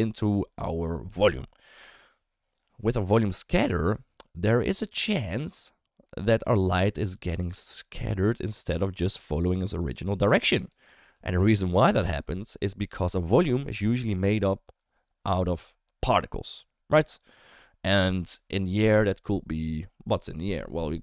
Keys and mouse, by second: 0.1 d, 8.8-11.0 typing, 9.1 click, 9.3 click, 9.5 click, 9.7 click, 9.9 click, 10.0 click, 10.2 click, 10.4 click, 10.5 click, 10.8 click.